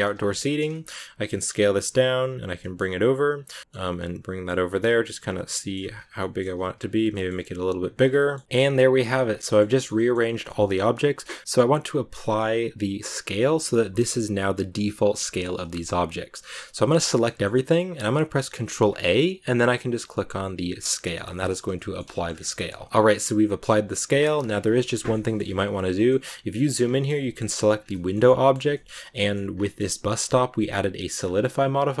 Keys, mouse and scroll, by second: 0.0-0.4 scroll down 4, 0.2 shift+middle click, 0.6 shift+middle click, 1.1 s, 2.5 g, 3.5 middle click, 3.9 scroll up 1, 3.9 middle click, 4.5 g, 5.1 scroll down 1, 5.3 middle click, 5.5 g, 6.1 middle click, 6.5 s, 7.9-13.7 shift+middle drag, 9.6 scroll up 1, 15.2 click, 15.6 shift+middle click, 16.5 a, 17.2-18.6 middle drag, 18.6 ctrl+a, 21.2 shift+middle click, 21.5 a, 21.6 middle click, 22.0 scroll up 3, 22.0 shift+middle click, 22.7 shift+middle click, 22.9 ctrl+a, 24.8 middle click, 25.1-25.8 scroll up 2, 25.8 shift+middle click, 26.1-27.3 scroll up 10, 27.3 right click, 27.6 scroll down 2, 27.8 shift+middle click, 28.6 scroll down 1, 28.6 shift+middle click, 29.4 scroll down 1, 29.6 middle click, 29.9-31.1 scroll up 2, 31.1-32.0 scroll up 1.